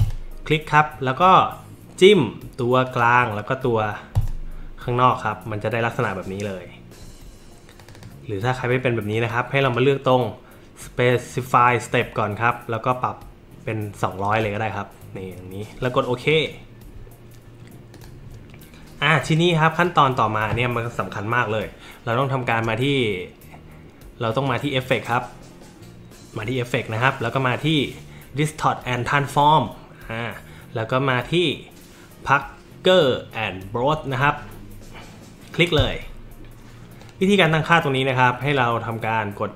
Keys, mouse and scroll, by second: 0.0 click, 2.9 click, 4.1 click, 7.8 click, 7.9 click, 9.1 click, 9.7 click, 14.3 click, 16.3 click, 19.3 click, 19.8 click, 24.5 click, 35.8 click, 37.0-38.5 drag.